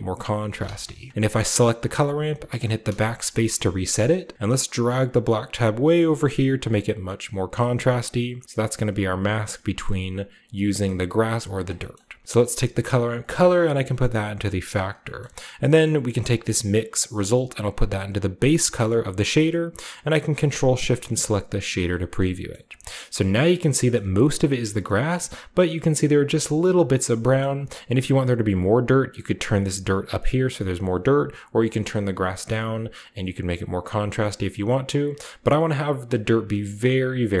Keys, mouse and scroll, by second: 1.5 click, 2.5-3.2 drag, 3.0 BackSpace, 3.4-4.6 middle drag, 3.4-5.2 scroll up 1, 4.6-7.5 drag, 7.7-8.4 scroll down 1, 9.5-10.3 middle drag, 10.4-11.5 scroll down 1, 10.7 middle click, 11.5 click, 12.2 click, 13.2-14.7 drag, 15.2-15.8 scroll up 1, 16.2 middle click, 17.1-18.6 drag, 18.9 click, 20.8 ctrl+shift+click, 21.5 click, 23.3-24.6 scroll up 2, 23.9-24.8 shift+middle drag, 24.6 scroll down 2, 25.1-26.8 middle drag, 25.9 scroll down 2, 26.0-26.5 scroll up 2, 27.1 scroll down 2, 28.2-30.9 drag, 30.7 right click, 31.1-32.8 drag, 33.3-35.0 drag, 36.1 scroll down 2, 36.5-37.4 middle drag.